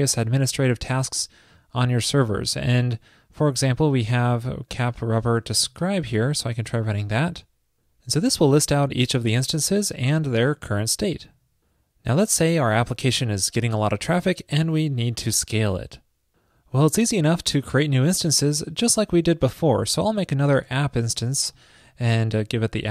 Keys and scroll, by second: 5.8 super+c, 6.3 super+v, 21.2 alt+Right, 21.7 alt+Right.